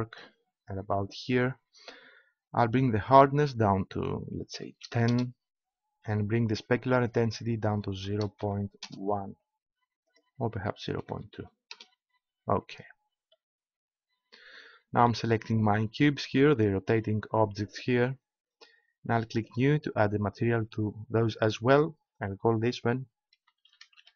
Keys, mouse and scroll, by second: 3.0-5.5 drag, 7.0-8.8 drag, 10.0-11.9 drag, 13.5-16.2 middle drag, 16.5-18.9 right drag, 19.4-21.2 drag, 21.7-23.5 drag, 23.5 middle click.